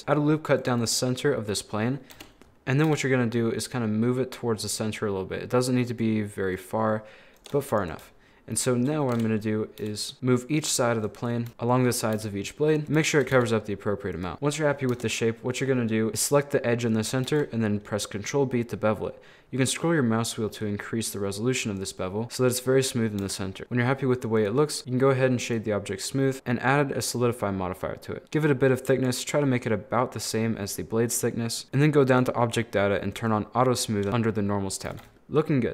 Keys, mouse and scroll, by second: 0.0 ctrl+r, 1.3 middle click, 2.1 KP_7, 2.9 g, 6.4-7.4 middle drag, 7.4 right click, 7.7 shift+right click, 9.1 KP_7, 9.8 g, 11.1 click, 12.2 g, 12.8 scroll up 1, 13.0 shift+middle click, 13.4 g, 14.3 middle click, 14.7 scroll up 3, 14.9 Tab, 15.1-17.3 middle drag, 17.3 ctrl+b, 22.2 middle click, 22.5 scroll down 1, 22.6 middle click, 23.2 Tab, 23.4 middle click, 24.4-26.1 drag, 26.1 middle click, 26.3-29.4 drag, 29.4-30.7 middle drag, 30.7 scroll down 1, 30.8-32.1 middle drag, 32.1 click, 33.1 click, 34.3 scroll down 1, 34.3 middle click, 35.0 a, 35.1 middle click.